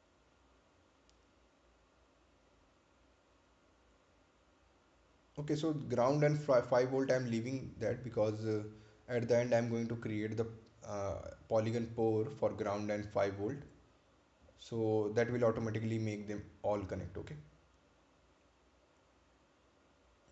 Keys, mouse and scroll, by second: 1.1-2.4 scroll up 1, 2.8 ctrl+click, 6.3 ctrl+click, 6.9 ctrl+click, 10.2 ctrl+click, 19.2 ctrl+click.